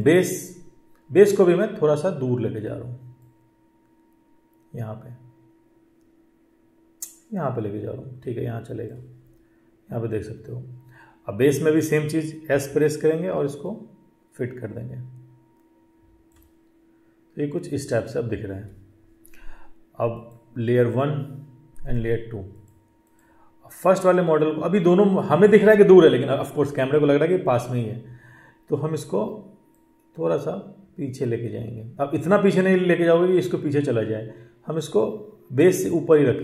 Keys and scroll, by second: 12.4 s.